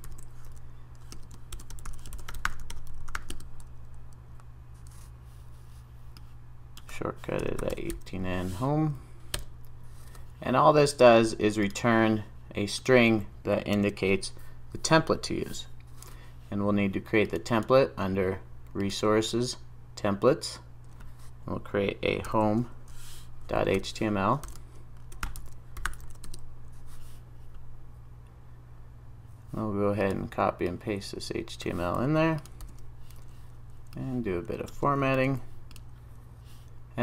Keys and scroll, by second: 9.7 Return, 13.7 super+s, 22.3 super+n, 32.7 super+v, 35.1 super+s.